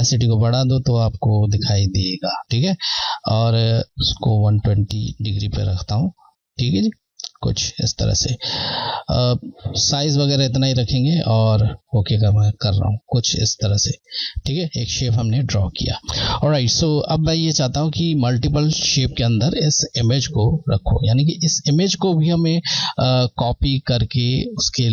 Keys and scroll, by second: 3.8 Left, 7.8 Left, 10.3 typing, 11.1 Left, 17.1 Left.